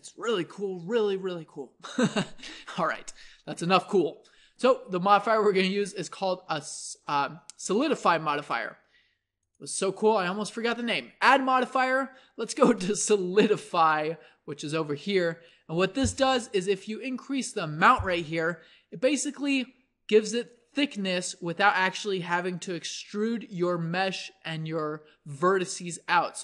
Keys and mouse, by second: 3.2-7.1 middle drag, 18.9-20.4 drag.